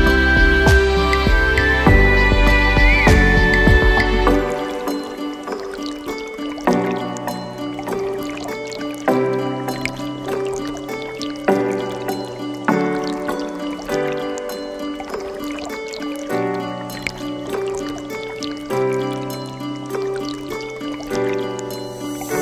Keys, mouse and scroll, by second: 1.9 click, 3.7 click, 4.5 click, 4.9-6.8 scroll down 5, 8.1-10.2 drag, 10.6-12.0 drag, 12.1 click, 14.4 click, 18.0 click.